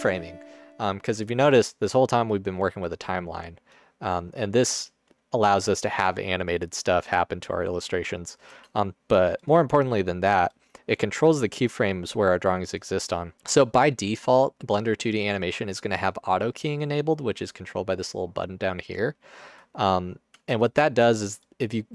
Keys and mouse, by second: 3.0 click, 3.2 click, 4.7 space, 8.6 space, 10.5 click, 20.3 Tab, 21.6-21.9 drag.